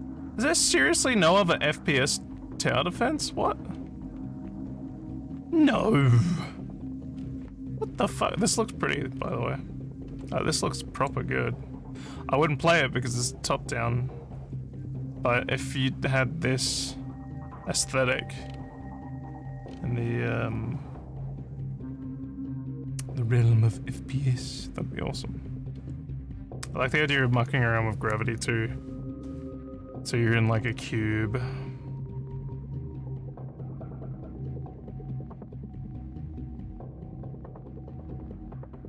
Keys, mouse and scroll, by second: 1.3 scroll down 1, 2.9 scroll down 2, 3.7 scroll down 1, 7.1 scroll up 5, 7.9 scroll up 2, 8.4 scroll down 3, 9.1 scroll, 10.0 scroll, 11.0 click, 18.4 scroll down 1, 19.6 scroll up 4, 25.7 scroll down 1, 25.8 scroll down 1, 30.5 scroll down 1, 30.8 scroll down 1, 31.9 scroll down 1, 34.6 scroll down 1, 38.0 scroll down 1.